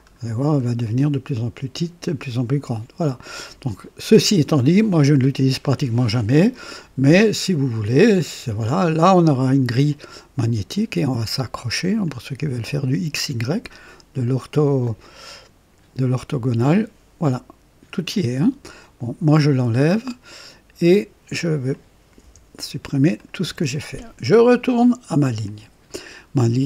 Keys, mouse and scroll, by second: 0.8-1.4 scroll up 3, 3.0 click, 8.1 click, 9.8 click, 11.9 click, 13.6 click, 16.5 click, 19.2 click, 20.3 right click, 21.6 click, 22.1 Delete, 23.0 click, 23.4 Delete, 25.3 click.